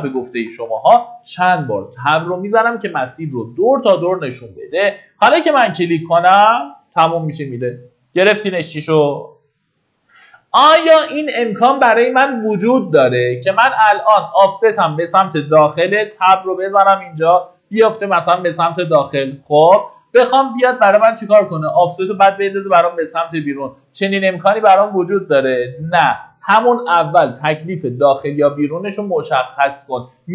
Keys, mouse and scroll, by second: 0.4 Tab, 4.6 click, 7.0 middle click, 9.5-11.2 scroll up 1, 15.4 Tab, 28.6 middle click.